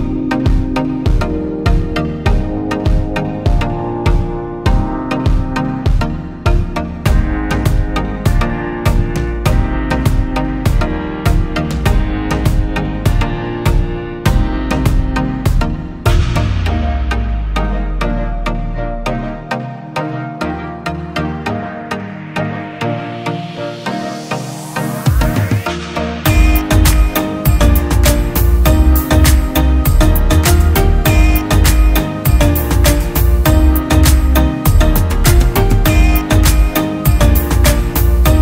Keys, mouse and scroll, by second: 2.1 ctrl+t, 4.1 alt+shift+click, 11.3 Return.